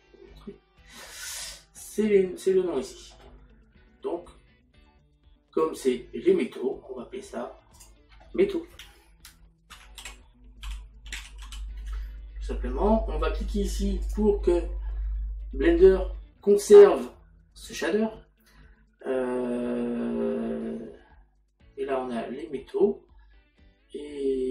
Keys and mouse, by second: 2.6 middle click, 7.8 click, 9.8 m, 13.7 click.